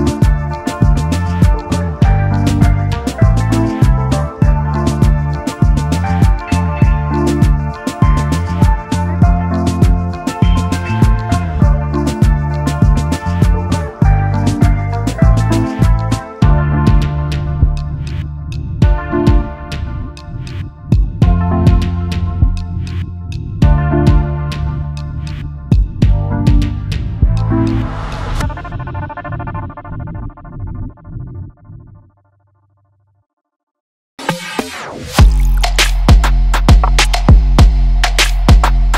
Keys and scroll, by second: 3.0 space, 4.6 space, 5.0 ctrl+s, 9.4 space, 10.7 space, 10.8 space, 31.2 space, 32.7 space, 32.8 space, 33.4 space.